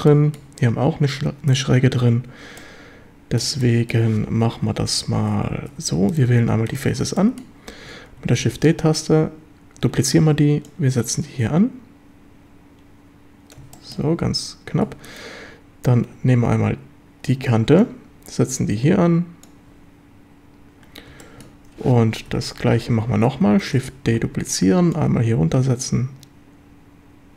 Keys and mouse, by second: 0.1 shift+click, 2.6 click, 3.6 shift+click, 4.5 KP_7, 5.7 3, 7.2 shift+click, 7.3 shift+middle click, 8.4 shift+d, 9.8 Escape, 10.6-13.5 drag, 13.7 shift+middle click, 14.9 2, 17.8-19.4 drag, 21.2 shift+middle click, 22.3 ctrl+l, 23.6 shift+d, 24.1 Escape, 24.9-27.3 drag.